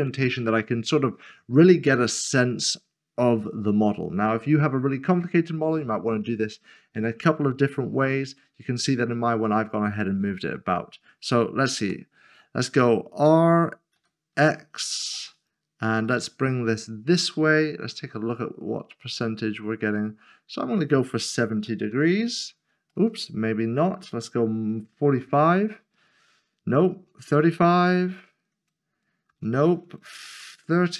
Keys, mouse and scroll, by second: 11.8 typing, 13.7-15.0 typing, 21.6-21.9 typing, 23.0 typing, 24.1 typing, 25.1 typing, 26.7-27.9 typing, 29.3-30.9 typing.